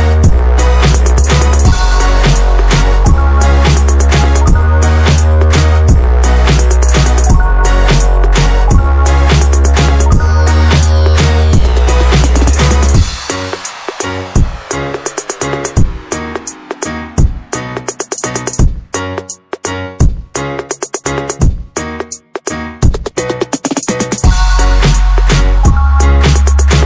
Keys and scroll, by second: 0.2 Escape, 0.7 Escape, 3.0 Escape, 4.6 m, 5.1 space, 5.3 Escape, 6.0 m, 6.5 Escape, 7.2 m, 8.1 Escape, 8.1 space, 8.5 Escape, 10.3 Escape, 10.8 Escape, 11.8-12.7 typing, 16.4 Escape, 16.4 s, 17.7 space, 18.3 Escape, 18.4 Escape, 19.1 Escape, 20.2 Escape, 20.6 Escape, 21.2-23.0 typing, 25.5 shift+Escape, 26.0 typing.